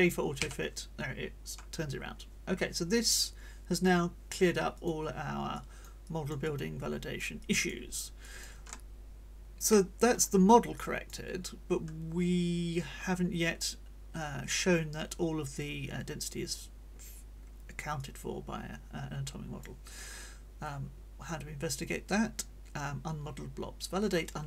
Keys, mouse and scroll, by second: 0.4 j, 4.7 click, 5.5 click, 6.4-7.9 middle drag, 6.4 click, 8.2 click, 9.7 middle click, 10.7 click, 18.0-19.8 drag, 20.6-24.4 drag.